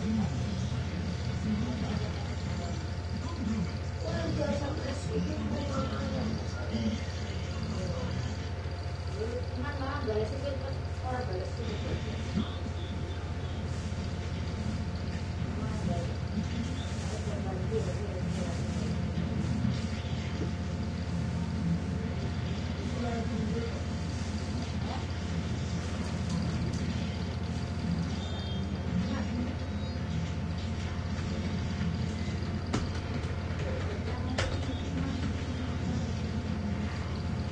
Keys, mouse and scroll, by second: 1.6 shift+click, 6.2 click, 7.0 click, 7.7 click, 9.5 click, 10.4 click, 11.5 click, 13.7 click, 15.2 click, 17.7 click, 19.7 click, 22.0 click, 23.6 click, 25.8 click, 31.1-35.8 typing, 37.2 click.